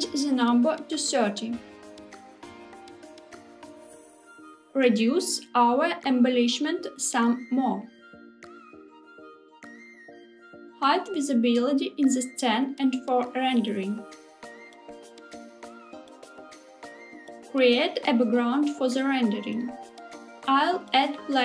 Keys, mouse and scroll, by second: 4.9 click, 5.8 s, 8.1 click, 9.0 s, 9.4 click, 11.5 click, 14.4 click.